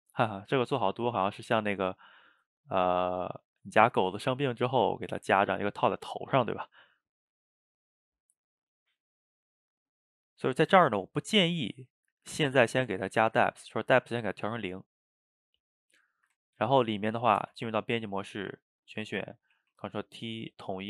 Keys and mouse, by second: 0.8-2.6 drag, 2.6-7.0 ctrl+middle drag, 7.0-10.1 drag, 14.2-15.5 drag, 15.5-16.1 middle drag, 16.1 shift+right click, 16.4-17.4 ctrl+shift+middle drag, 17.4 Tab, 18.2-18.6 middle drag, 18.6 a, 19.6 ctrl+t.